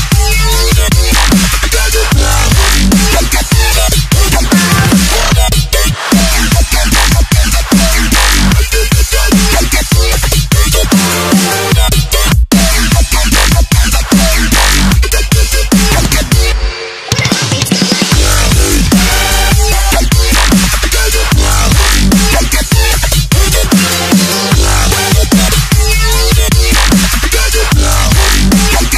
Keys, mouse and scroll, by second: 1.9 click, 2.0 Delete, 2.3-3.1 scroll up 1, 3.1 click, 5.2 Tab, 5.7 right click, 6.5 Tab, 7.0 v, 7.5 click, 9.3 click, 15.0 click, 18.4 Down, 18.5 Left, 19.4 Tab, 19.8 click, 21.2 Tab, 21.6 click, 22.7 click, 24.0 t, 24.0 click, 28.5 click.